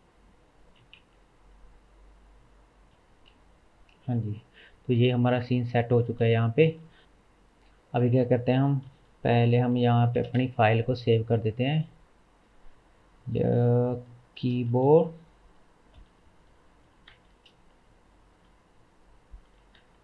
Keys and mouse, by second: 1.0 Tab, 1.9 middle click, 2.2-20.0 drag.